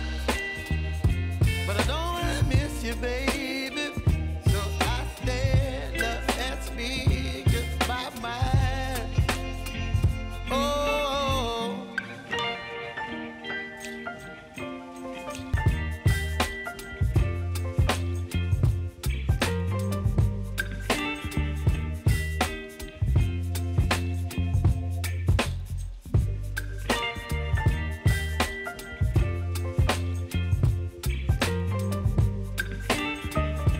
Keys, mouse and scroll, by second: 0.0 click, 1.1 [, 2.8 click, 5.2 alt+[, 5.6 space, 9.5 space, 11.0-11.4 typing, 14.6 space, 17.2 space, 19.1 click, 19.7 space, 21.9 click, 22.3 u, 23.2 click, 23.7 space, 28.4 space, 29.6 click, 32.5-33.7 drag.